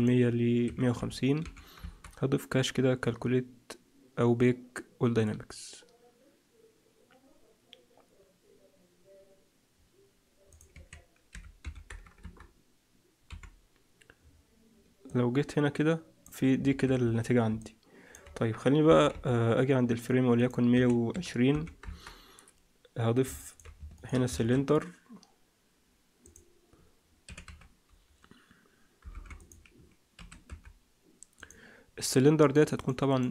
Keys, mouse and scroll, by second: 5.1 click, 10.4 click, 13.2 Home, 15.0 click, 16.6 alt+a, 16.9 z, 17.5 middle click, 18.3-18.8 scroll down 3, 18.8 scroll down 1, 18.8 KP_1, 19.0 KP_7, 19.4-20.3 scroll up 2, 20.3 click, 23.3 shift+middle click, 23.9 shift+right click, 24.3 shift+a, 27.2 r, 30.1 s, 32.7 click, 33.0 click.